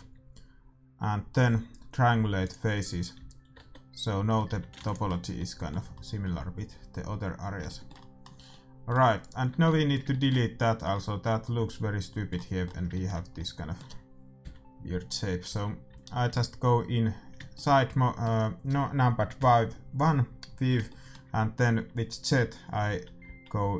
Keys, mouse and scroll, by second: 3.2 a, 3.4 middle click, 3.5 Tab, 3.8 middle click, 4.2-5.3 scroll up 1, 4.4 a, 4.7 ctrl+s, 5.3 middle click, 8.8 middle click, 9.2-10.5 right drag, 9.6 Tab, 10.5 click, 10.9-12.5 middle drag, 15.4 z, 15.9 a, 16.3 a, 17.5-19.3 middle drag, 20.8-22.7 middle drag, 22.9 z, 23.2 z.